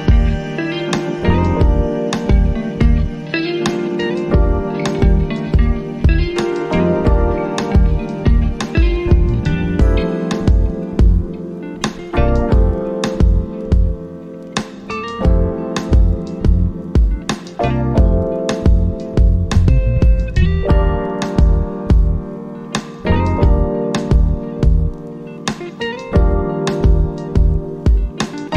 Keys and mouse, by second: 5.4-11.5 drag, 12.7-14.0 drag, 15.6 right click, 16.6 click, 20.9 click, 23.4-28.5 drag.